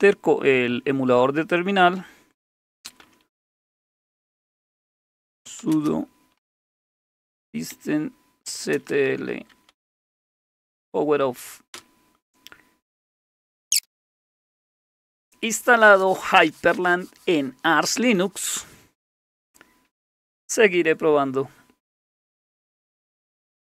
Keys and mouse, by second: 2.6-11.1 typing, 11.7 Return, 13.0-14.5 typing, 14.5-23.6 drag.